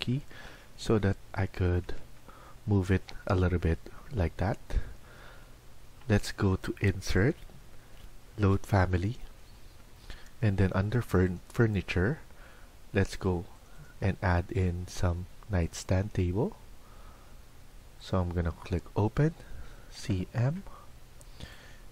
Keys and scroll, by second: 0.2 Down, 0.7 Down, 4.0 shift+Escape, 4.2 shift+Escape.